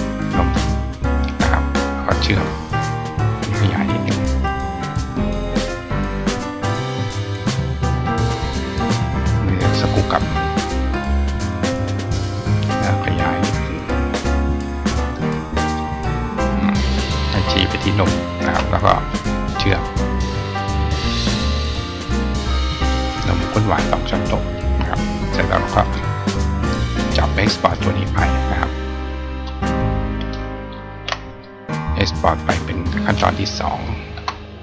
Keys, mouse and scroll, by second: 2.2 click, 3.5 click, 4.2 click, 5.6 click, 8.4 click, 8.9 click, 10.1 click, 10.9 click, 12.5 click, 14.9 click, 16.5 click, 20.2 click, 20.9 click, 22.6 right click, 24.3 click, 25.7 click, 27.2-29.3 drag.